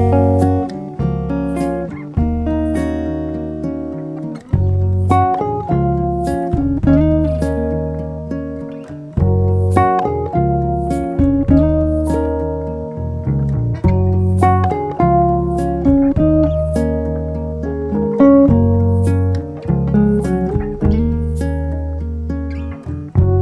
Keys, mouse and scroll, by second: 0.4 3, 2.0 alt+click, 3.5 g, 3.6 z, 5.2 click, 6.4 g, 6.5 z, 7.7 click, 9.2 Tab, 10.8-11.3 drag, 15.6 ctrl+j, 18.2 a, 20.6 shift+click, 21.0 shift+click, 22.4-23.4 drag.